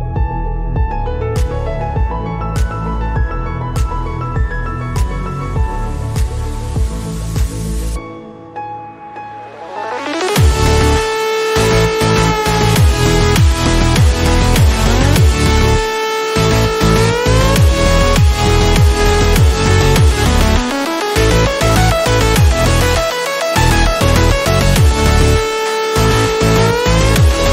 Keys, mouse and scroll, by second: 2.1-5.6 drag, 5.6 scroll down 1, 6.7 scroll up 1, 7.3-8.4 scroll up 1, 8.4 click, 8.4 click, 13.9 click, 15.6 alt+scroll up 1, 17.0-17.4 scroll up 2, 17.8 scroll up 1, 18.6 click, 20.8-21.2 scroll down 1, 21.2 click, 23.5 click, 24.5 scroll up 1, 25.5 click.